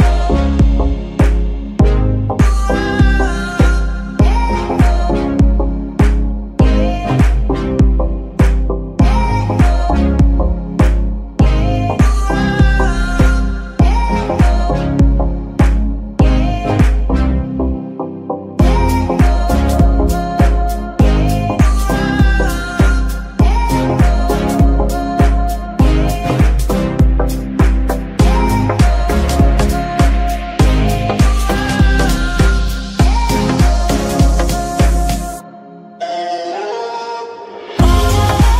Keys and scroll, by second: 5.7 g, 6.1 Escape, 12.1-13.0 typing, 14.2-14.5 typing, 16.9 shift+-, 17.1 shift+Return, 19.8 Tab, 20.3 shift+s, 21.6 Tab, 22.0 shift+s, 23.1 KP_Decimal, 33.3 KP_9, 33.5 KP_0, 33.6 Return.